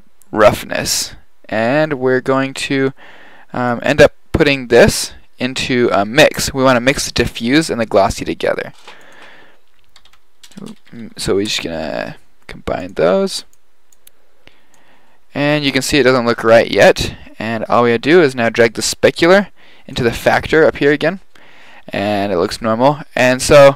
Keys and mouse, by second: 1.9-5.7 drag, 8.7 shift+a, 10.6 BackSpace, 13.5 click, 18.8-20.8 drag.